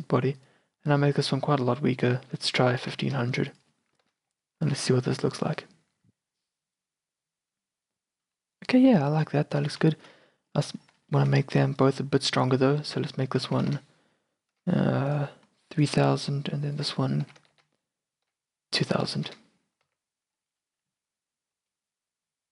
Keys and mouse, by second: 1.0 r, 2.0-4.1 drag, 3.1 KP_0, 4.3 KP_0, 4.7 z, 8.1-9.2 middle drag, 9.7 z, 10.3 a, 10.9-13.0 drag, 13.0 middle click, 13.8-15.5 drag, 13.8 KP_0, 16.8-19.0 middle drag, 17.6 KP_0, 19.3 KP_0, 20.0 z.